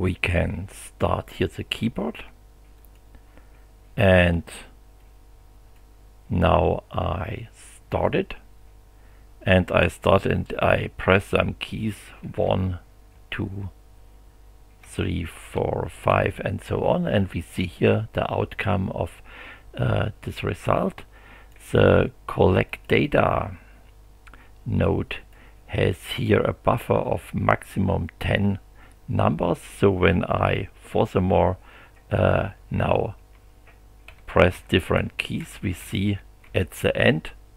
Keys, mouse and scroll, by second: 2.8 click, 5.0-5.9 drag, 7.9 click, 12.2 1, 13.1 2, 14.8 3, 15.4 4, 16.1 5, 20.5 click, 22.7 click, 24.8-25.5 drag, 31.8-37.0 typing.